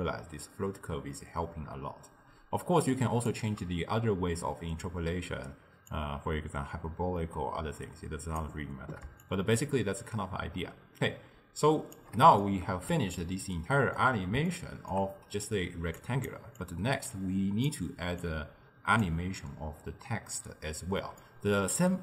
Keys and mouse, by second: 0.0-3.1 shift+drag, 6.0-9.0 drag, 9.3-12.3 shift+drag, 12.5-15.9 middle drag, 15.9 d, 16.0 click, 16.4 d, 16.7-17.7 drag, 17.7-18.2 d, 18.3-19.1 drag, 19.1 d, 19.2 d, 20.2 d, 21.2-22.0 middle drag.